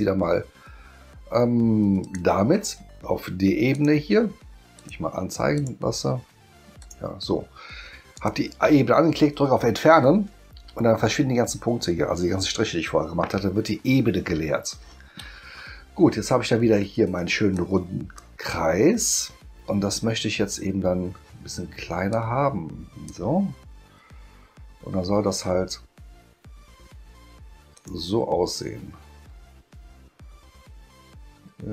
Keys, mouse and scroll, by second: 2.0 click, 3.7 click, 4.7 click, 5.5 click, 6.8 click, 8.1 click, 17.5 click, 22.1 click, 27.8 click.